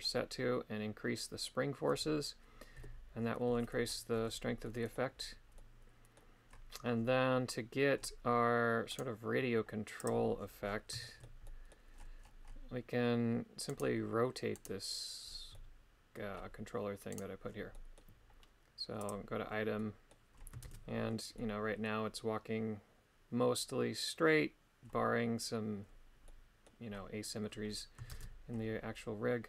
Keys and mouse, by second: 2.8 KP_3, 4.6 middle click, 5.6 middle click, 8.9 right click, 11.1 shift+middle click, 11.5 middle click, 13.7 right click, 14.6 right click, 15.5 middle click, 17.1 right click, 17.7 middle click, 19.0 click, 19.8 middle click, 20.6 shift+space, 21.4 middle click, 26.3 middle click, 28.2 shift+space.